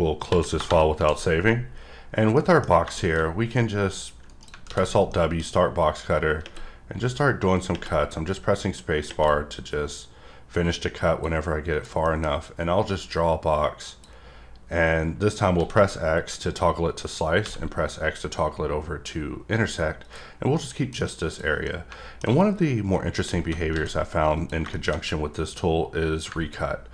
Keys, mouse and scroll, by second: 1.6-1.9 scroll up 3, 2.0 scroll down 1, 2.1 scroll up 1, 2.3 middle click, 2.6 scroll down 2, 2.9 middle click, 3.7 click, 4.3 right click, 5.1 middle click, 5.8 click, 7.1 click, 8.3 click, 9.9 click, 11.7 click, 12.0 middle click, 12.9 click, 14.0 drag, 20.0 click, 20.5 middle click, 21.3 click, 21.6 middle click, 23.0-23.7 scroll up 2, 24.3 click, 24.7 middle click, 25.5 click.